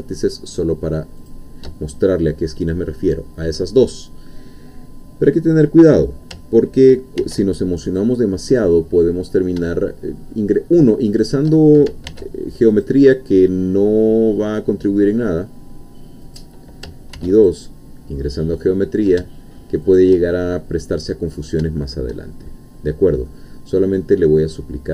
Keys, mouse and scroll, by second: 1.2 shift+click, 7.2 ctrl+r, 8.0 click, 11.1 shift+click, 12.1 ctrl+r, 12.7 click, 16.3 click, 17.1 ctrl+r, 17.4 ctrl+click, 19.8 shift+click, 20.6-21.0 shift+scroll down 3, 22.5-22.9 shift+scroll up 3, 22.9-23.3 scroll down 2, 23.3-24.9 middle drag.